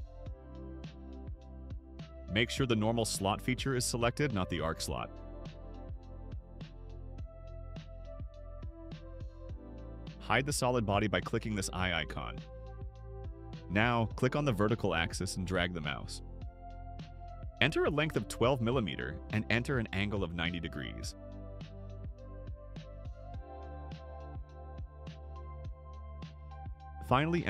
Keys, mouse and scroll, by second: 0.9 click, 2.7 click, 8.5 click, 9.0 scroll up 2, 12.8 click, 14.7 click, 18.2-19.1 typing, 20.0 Return, 22.1 Return, 23.6 Return, 24.9-26.1 typing, 26.6 Return.